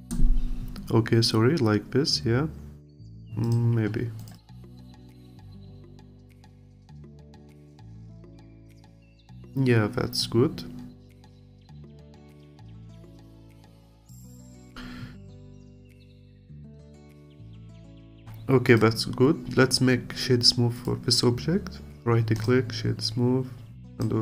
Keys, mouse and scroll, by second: 4.3 click, 4.8-7.3 alt+drag, 7.3-7.7 scroll down 1, 7.7-10.7 alt+drag, 14.9-15.2 scroll up 1, 15.2 click, 15.9 click, 16.3-18.8 alt+drag, 19.9-20.8 scroll up 2, 20.8-23.9 right drag, 23.9 click.